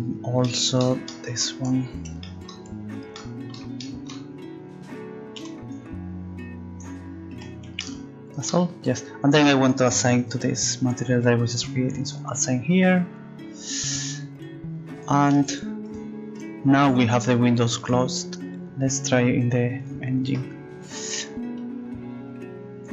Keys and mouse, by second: 14.9-19.9 drag, 21.3 click, 22.7 click.